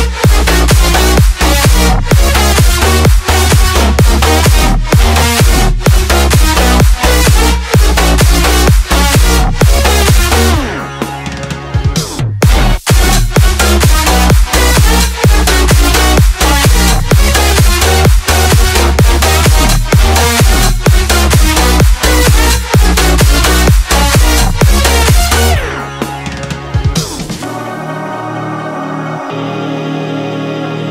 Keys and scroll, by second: 5.7 Return, 6.0 Up, 26.5 space, 28.3 space.